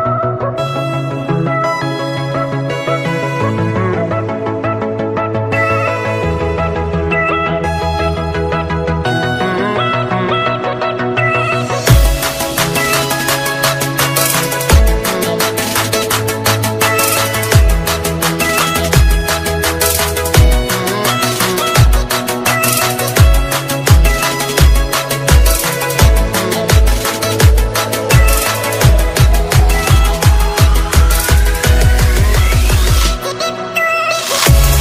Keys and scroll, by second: 0.2 alt+space, 3.4 ctrl+space, 4.2 alt+space, 10.6 ctrl+space.